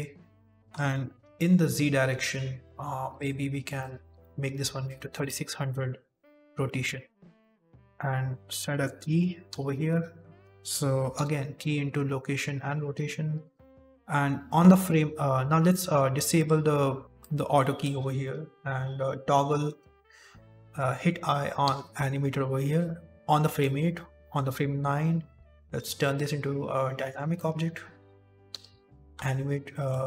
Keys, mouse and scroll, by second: 1.1 m, 1.9 n, 3.0 click, 3.7 click, 4.9 KP_0, 6.1 middle click, 6.7 z, 7.3 middle click, 9.3 i, 11.0 i, 12.7-13.5 scroll down 5, 12.9 z, 13.5 shift+middle click, 14.4 click, 16.2 click, 17.1 click, 21.5 i, 23.5 click, 25.9 click, 27.3 middle click, 28.4 i, 29.6 shift+middle click.